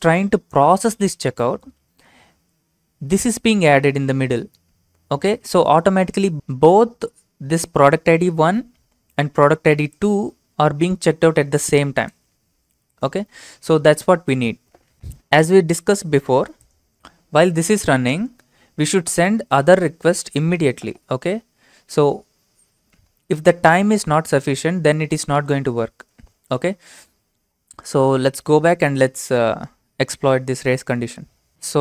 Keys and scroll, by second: 13.8 alt+Tab.